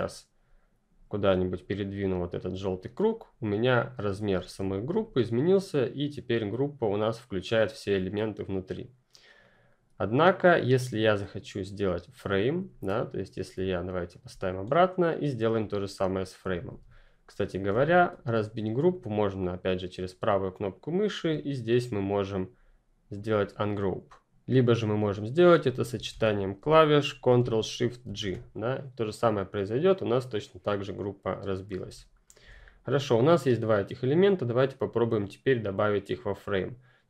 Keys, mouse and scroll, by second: 8.6 click, 13.5 ctrl+click, 19.3 right click, 23.7 click, 25.4 click, 28.0 ctrl+shift+g, 28.6 click, 31.7 Delete, 31.9 click, 32.3 Delete, 33.5 click, 34.4 right click.